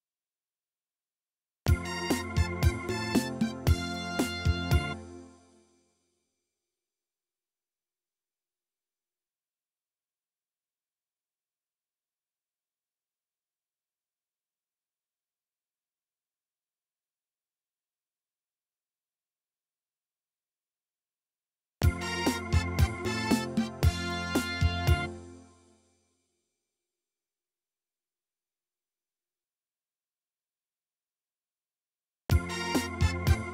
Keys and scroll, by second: 1.6 space, 4.9 space, 21.7 space, 25.0 space, 32.2 space.